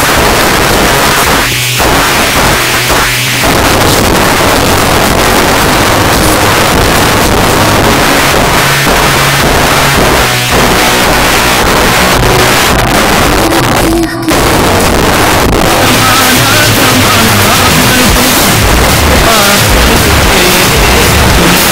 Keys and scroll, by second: 1.8 c, 1.9 Down, 2.3-2.8 Down, 3.0 Down, 3.1 Down, 3.3 Down, 3.4 Down, 3.6 Down, 3.9 Down, 4.1 Return.